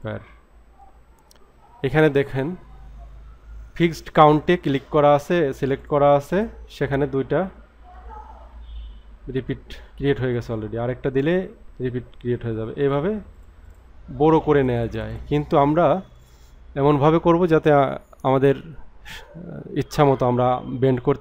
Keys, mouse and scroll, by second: 5.7 click, 10.3 click, 11.2 scroll down 3, 12.8 click, 13.4 click, 13.7 click, 14.6 click.